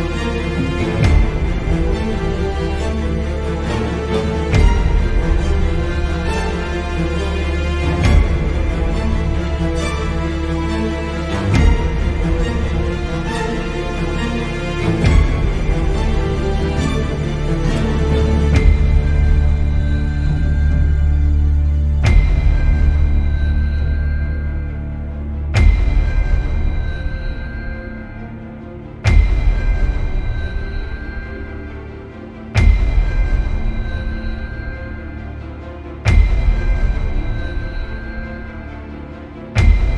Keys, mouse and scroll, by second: 0.1 scroll up 2, 0.3-0.9 scroll down 2, 1.5-2.7 scroll up 2, 2.7-3.0 scroll up 1, 3.0 ctrl+KP_Add, 5.7 ctrl+z, 7.6 ctrl+KP_Add, 8.3 click, 9.1 click, 9.3 click, 9.7-10.3 scroll down 2, 10.3 ctrl+i, 11.0 scroll up 2, 11.3-17.6 middle drag, 11.9-12.8 scroll up 2, 12.8 scroll up 1, 12.8 `, 13.2-13.5 scroll down 2, 13.5-15.0 scroll up 4, 15.0 z, 17.7 click, 17.8-18.8 scroll down 6, 17.9 middle click, 18.4 z, 18.8-19.2 middle drag, 19.2 Tab, 19.3 scroll down 2, 19.5 middle drag, 19.8-20.3 scroll up 2, 20.3-20.7 shift+middle drag, 20.7 scroll down 2, 21.0-22.3 middle drag, 21.4 Tab, 22.3 click, 22.5 click, 23.0 click, 23.3 alt+shift+click, 23.6-26.4 middle drag, 24.1 scroll up 2, 24.4 scroll down 2, 24.9 x, 26.3 Tab, 26.4 click, 27.0 Delete, 27.4 click, 27.6 Tab, 27.9 click, 28.2 alt+shift+click, 28.6-29.7 middle drag, 29.2-29.7 scroll down 4, 30.4-36.4 middle drag, 30.4 e, 33.4 KP_Enter, 34.0 Tab, 34.7 scroll down 2, 35.9 Tab, 36.4 f, 38.2 `, 38.7 scroll down 1, 39.4 middle click.